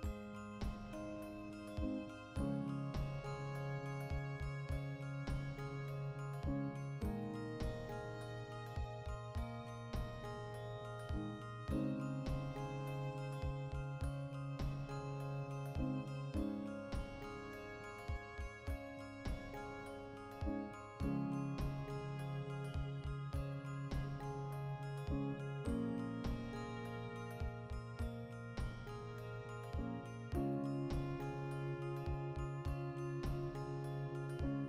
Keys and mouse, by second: 2.2 alt+right click, 2.8 ctrl+b, 4.2 right click, 4.7 Tab, 5.1 shift+d, 5.8 right click, 5.8 \, 6.3 shift+middle click, 6.5 Tab, 7.3 ctrl+middle click, 7.7 ctrl+b, 13.0 click, 13.4 3, 13.6 right click, 13.8-15.0 middle drag, 15.0 ctrl+right click, 15.2-16.3 middle drag, 16.1 shift+d, 16.5 alt+right click, 17.0 middle click, 17.5 ctrl+right click, 17.9 shift+d, 18.6 middle click, 19.1 ctrl+right click, 19.6 shift+d, 20.0 middle click, 20.4 ctrl+right click, 20.8 shift+d, 21.5 l, 22.7-24.5 middle drag, 24.5 \, 25.0 a, 25.2 middle click, 25.3 ctrl+middle click, 25.5 middle click, 25.8 shift+middle click, 25.9 middle click, 26.8 ctrl+middle click, 27.0 middle click, 27.3 ctrl+middle click, 27.8 ctrl+r, 28.1 right click, 28.2 ctrl+r, 28.5 right click, 28.6 ctrl+r, 29.0 right click, 29.1 ctrl+r, 29.6 right click, 29.7 ctrl+z, 30.0 ctrl+r, 30.6 alt+shift+right click, 31.3 g, 32.7 click, 32.8 a, 33.1-34.4 middle drag, 34.2 ctrl+r, 34.4 right click, 34.5 ctrl+r.